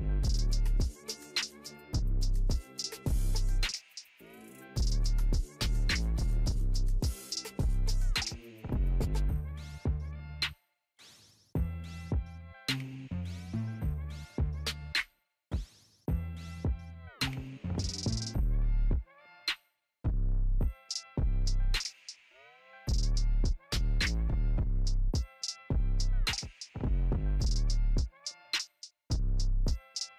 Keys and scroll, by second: 19.0 ctrl+t.